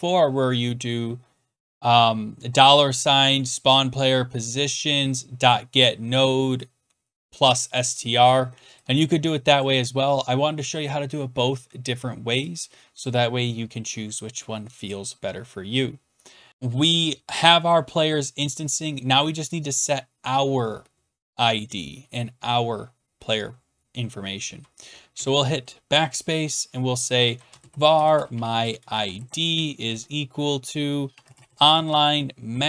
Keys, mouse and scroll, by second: 2.9 click, 5.4 click, 7.4 click, 9.6-10.4 scroll down 1, 13.0 click, 14.9 click, 25.1 BackSpace, 26.9-29.7 typing, 30.8-32.6 typing.